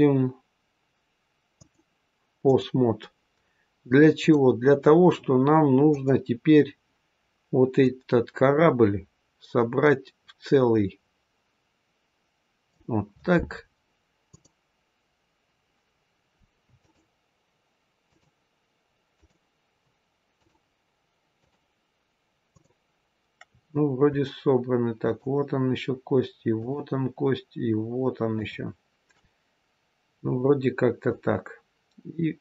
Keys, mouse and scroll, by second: 1.5 click, 4.1 click, 5.8 click, 7.7 click, 14.2 click, 16.7-23.3 shift+click, 30.9 click.